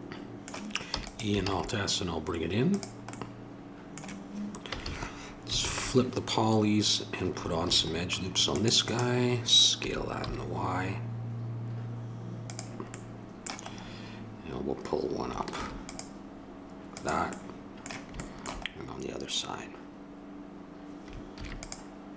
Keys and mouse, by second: 0.9 e, 1.4 alt+s, 4.7 a, 4.8 a, 5.6 ctrl+n, 7.6 ctrl+r, 9.8 s, 12.9 middle click, 13.2 click, 13.3 middle click, 13.4 click, 13.5 click, 13.7 middle click, 13.8-15.5 drag, 15.5 ctrl+r, 21.3 ctrl+r.